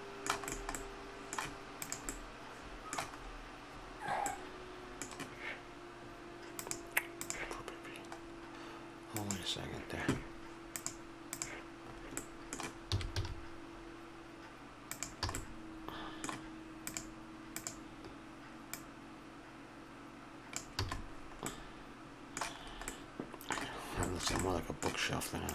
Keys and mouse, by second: 1.8 right click, 2.3-6.6 middle drag, 6.6-8.3 drag, 8.3 middle click, 9.1-12.6 drag, 12.6-14.9 middle drag, 12.9 s, 15.3 a, 15.5 click, 16.8-20.5 drag, 20.8 a, 21.5-25.5 middle drag.